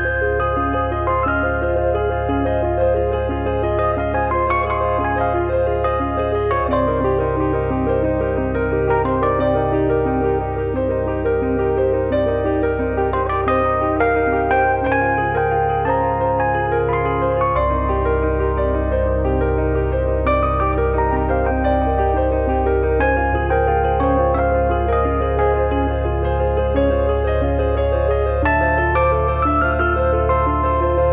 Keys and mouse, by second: 0.6 click, 1.7 e, 2.2 click, 2.9 f, 3.2 KP_3, 4.9 click, 5.5 click, 6.1 click, 7.0 click, 7.6 middle click, 8.0 middle click, 8.7 click, 10.0 middle click, 10.6 alt+z, 11.0 click, 11.7 middle click, 12.2 click, 12.8 middle click, 13.5 click, 14.4 middle click, 16.3 click, 16.9 shift+middle click, 18.1 click, 21.3 click, 22.4 click, 23.0 click, 25.6 click, 27.2 click, 28.3 middle click, 28.6 KP_1, 29.9 middle click, 30.6 alt+z, 30.8 middle click.